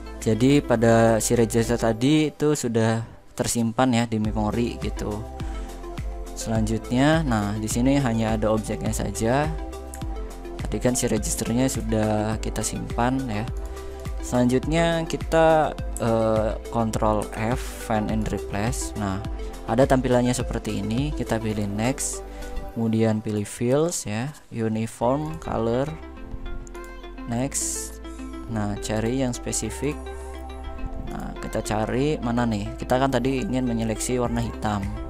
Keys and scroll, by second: 16.9 ctrl+f.